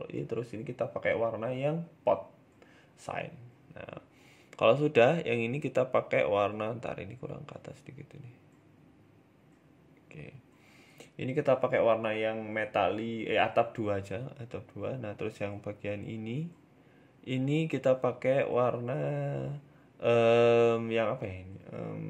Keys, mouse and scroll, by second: 2.0 click, 2.3 Tab, 2.5 middle click, 2.8-3.4 scroll down 3, 3.1 middle click, 3.4 middle click, 3.7 shift+middle click, 4.0 shift+middle click, 4.6 right click, 4.8 shift+middle click, 5.1 scroll up 2, 5.3 middle click, 5.5 shift+middle click, 6.2 g, 7.1 Tab, 7.5 click, 8.5 g, 9.8 Tab, 10.5 click, 13.1 scroll down 3, 13.3 middle click, 13.9 scroll up 1, 14.1 middle click, 14.4 Tab, 14.5 middle click, 14.9 Tab, 15.6 right click, 15.7 Tab, 16.5 middle click, 17.2 KP_1, 17.8-18.5 scroll up 2, 19.0 c, 21.3 middle click, 21.6 scroll down 1, 21.7 shift+middle click.